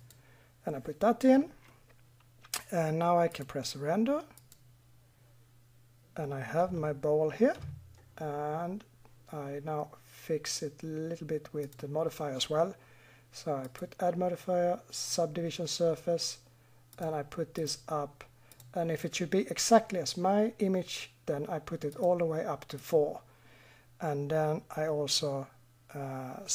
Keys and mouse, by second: 1.7 middle click, 2.9 middle click, 4.8 middle click.